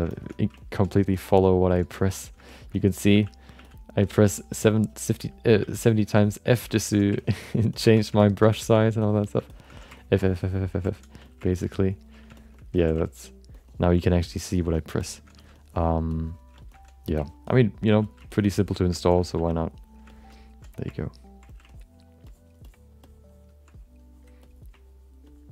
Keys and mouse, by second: 0.1 alt+shift+middle click, 0.3 middle click, 0.5 ctrl+alt+middle click, 0.9 click, 1.1 click, 1.9 click, 2.5 alt+shift+middle click, 2.7 middle click, 3.1 f, 3.5 f, 4.1 click, 4.3 click, 4.7 click, 5.6 f, 5.9 ctrl+click, 6.1 ctrl+click, 6.7 alt+shift+middle click, 7.2 ctrl+click, 7.5 ctrl+click, 7.7 ctrl+click, 8.2 alt+shift+middle click, 8.5 f, 8.8 ctrl+click, 9.5 alt+shift+middle click, 10.0 ctrl+click, 10.2 click, 10.9 middle click, 11.2 f, 11.5 click, 12.4 alt+shift+middle click, 12.7 f, 13.0 ctrl+click, 13.5 ctrl+click, 14.1 click, 14.5 click, 15.0 alt+shift+middle click, 15.3 f, 15.5 click, 16.1 click, 16.5 shift+middle click, 17.2 ctrl+click, 17.5 ctrl+click, 18.0 f, 18.3 ctrl+click, 18.9 shift+middle click, 19.1 alt+middle click, 19.3 f, 19.5 click, 20.1 alt+shift+middle click, 20.3 middle click, 21.7 ctrl+click, 22.2 click, 22.7 click, 23.0 click, 23.7 click, 24.4 click, 24.8 ctrl+click, 25.3 ctrl+click.